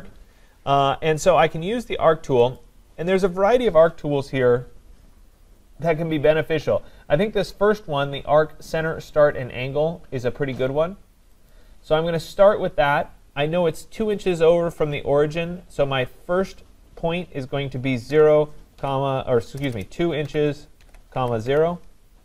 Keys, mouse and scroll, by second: 2.6 click, 11.5 click, 18.1-21.5 typing.